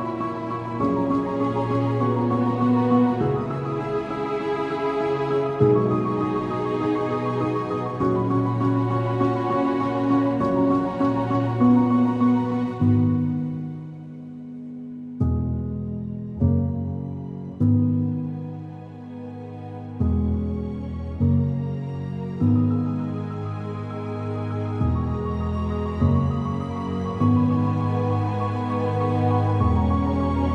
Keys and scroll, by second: 0.3 alt+x, 1.0 ctrl+alt+z, 1.2 ctrl+alt+x, 1.7-2.4 typing, 8.0 ctrl+alt+g.